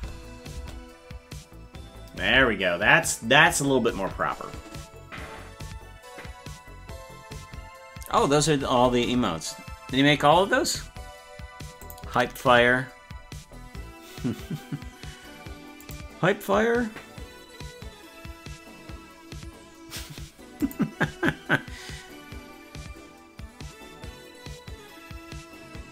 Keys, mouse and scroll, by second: 0.5 space.